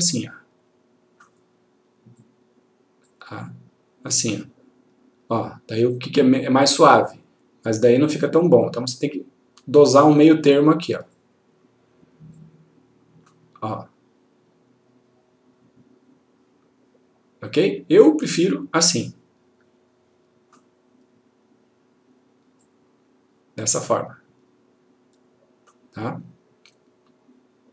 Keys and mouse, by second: 8.7-10.3 click, 18.5-20.6 click, 22.7 click.